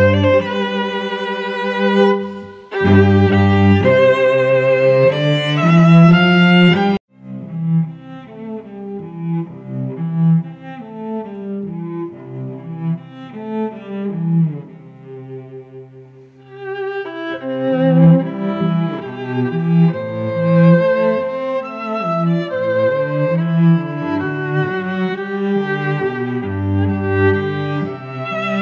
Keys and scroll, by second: 15.0 space, 16.4 ctrl+v, 18.0 ctrl+alt+g, 24.9 ctrl+shift+n, 25.2 Return, 26.1 ctrl+BackSpace, 27.1 ctrl+d, 28.0 e.